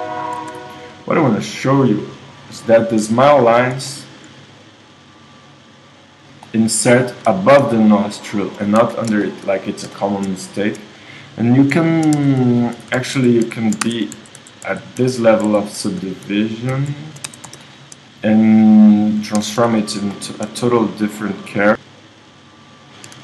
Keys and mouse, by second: 0.4 Tab, 6.0 click, 6.5-8.0 middle drag, 8.9 KP_1, 12.2 Tab, 13.1-15.5 typing, 13.9 Tab, 16.7 z, 17.3 Tab, 19.4 ctrl+Tab, 23.1 s.